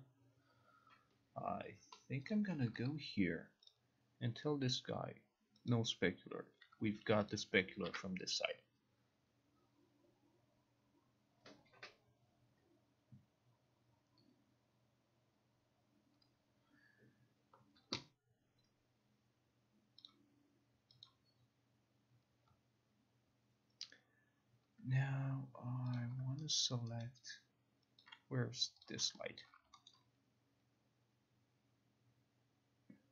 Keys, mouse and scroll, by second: 2.4 click, 3.8 click, 5.8 click, 7.4 click, 7.9 ctrl+r, 20.2 click, 21.1 click, 26.1 click, 26.7 alt+right click, 27.1 alt+right click, 28.1 alt+click, 28.1 alt+right click, 28.9 click, 29.5 alt+click, 30.0 alt+middle click.